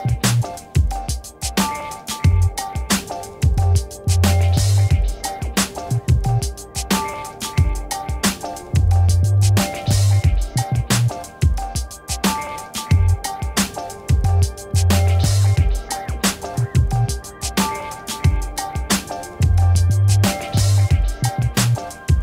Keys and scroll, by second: 2.1 i, 3.1 BackSpace, 4.0 shift+i, 4.3 n, 5.7 t, 7.9 ctrl+a, 10.4 Return, 11.8 Return, 11.9 v, 14.0 t, 16.3 4, 16.8 Return, 17.7 v.